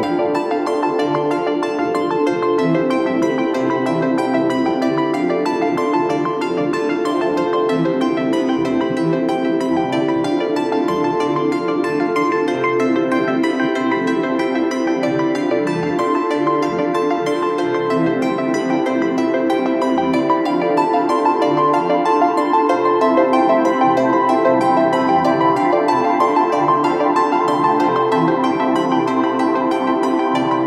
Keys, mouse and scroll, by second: 11.7-13.5 scroll down 1, 30.1-30.6 [.